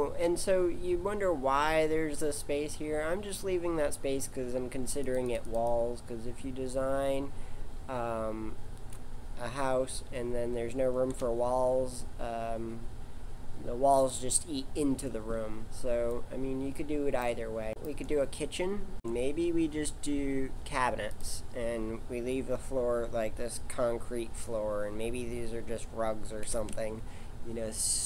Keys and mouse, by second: 5.0 click, 9.9 g, 17.7 KP_5, 17.7 KP_7, 18.9 ctrl+z, 18.9 shift+a, 26.4 g.